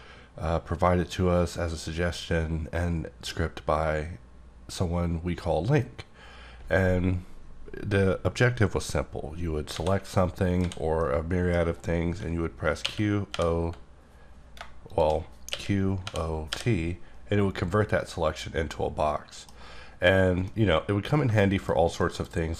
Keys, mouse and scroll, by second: 10.6 a, 11.0 middle click, 12.8-13.3 typing, 14.9 shift+click, 15.5-16.5 typing, 18.0-19.5 middle drag, 20.4 middle click, 21.7 scroll down 1, 22.0 middle click.